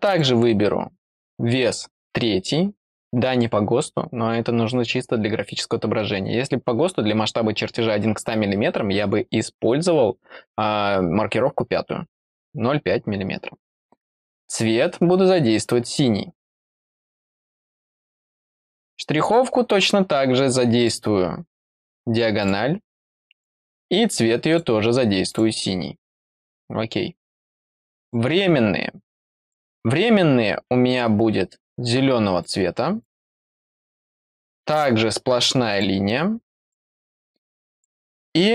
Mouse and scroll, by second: 0.1 click, 1.0 click, 1.9 click, 14.5 click, 16.5 click, 17.1 click, 18.1 click, 19.2 click, 20.8 click, 22.4 click, 23.3 click, 24.5 click, 25.3 click, 26.4 click, 28.0 click, 29.4 click, 30.9 click, 32.4 click, 33.0 click, 33.9 click, 35.7 click, 36.6 click, 37.7 click.